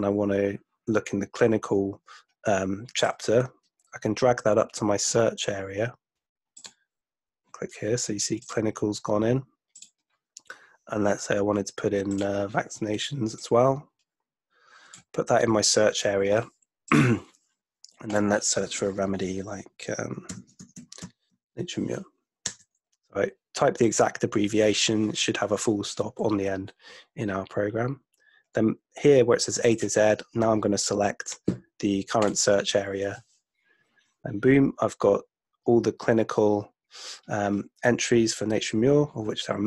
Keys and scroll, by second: 20.1-21.5 typing, 22.6 Return.